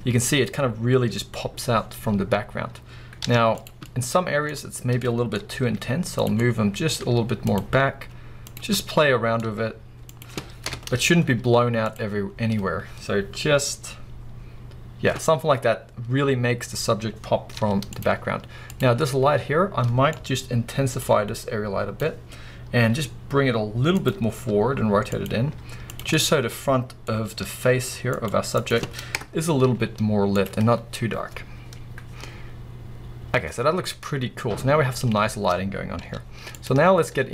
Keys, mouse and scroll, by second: 3.2 z, 3.8-6.3 middle drag, 4.5-5.0 scroll up 2, 5.6 g, 6.3 click, 6.4-7.6 middle drag, 7.0 g, 7.6 click, 8.4 click, 8.7 scroll up 1, 8.8-9.2 middle drag, 9.4 g, 10.2 click, 10.7 KP_0, 11.3 z, 17.5 z, 18.2-18.7 scroll down 2, 18.7 click, 19.1-21.0 middle drag, 20.1 scroll down 1, 21.0-24.0 drag, 22.3-22.9 scroll down 2, 22.9 g, 24.4 r, 25.2 click, 25.5 g, 25.9 click, 26.2-28.3 middle drag, 27.2 r, 28.3 click, 28.3 g, 28.7 click, 29.1 KP_0, 29.7 z, 31.3 scroll up 1, 35.6 scroll up 1, 36.2 z.